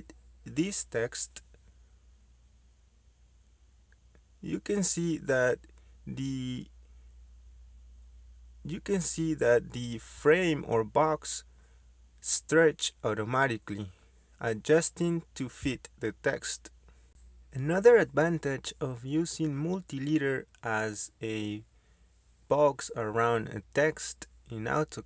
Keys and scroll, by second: 2.9-4.5 typing, 5.7-6.5 typing, 23.4 Escape.